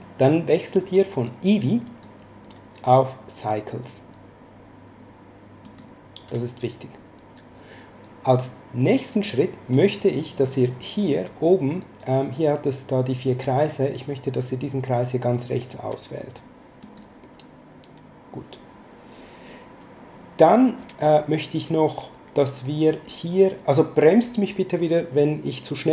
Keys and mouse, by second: 1.8 click, 5.6 click, 16.8 click.